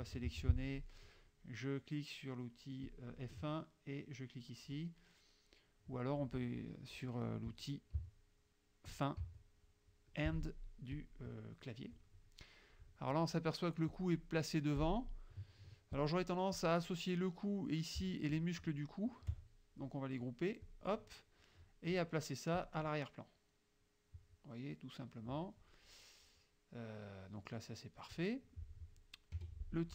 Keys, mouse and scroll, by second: 0.2 F3, 0.4 F2, 0.4 click, 2.9 click, 8.1 End, 9.3 End, 11.0 click, 14.0 click, 16.0 click, 16.6 click, 18.4 shift+click, 20.7 click, 22.7 click, 23.7 middle click, 24.6-25.6 scroll up 1, 26.3-27.5 scroll up 1, 28.4-28.9 scroll up 1, 29.4 F2, 29.8 click.